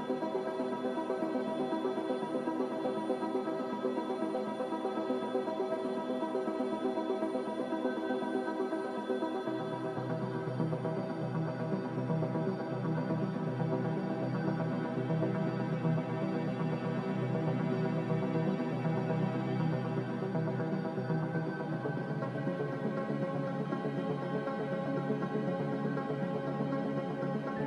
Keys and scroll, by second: 6.4 b, 12.0 a, 23.7 z.